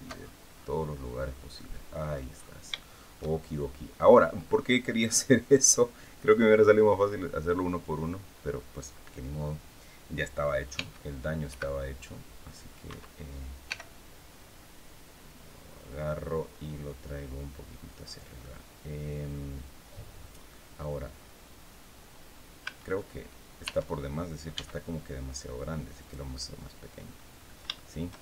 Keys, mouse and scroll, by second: 0.9 scroll down 1, 1.2 middle click, 2.4 shift+scroll up 1, 2.4 shift+middle click, 4.4-5.6 middle drag, 10.4 g, 12.5 Escape, 13.3 g, 17.7 click, 18.1-20.3 middle drag, 22.3 a, 22.6 middle click, 23.3 Tab, 24.2 s, 25.7-27.0 drag, 27.4 shift+click, 28.0 shift+Tab.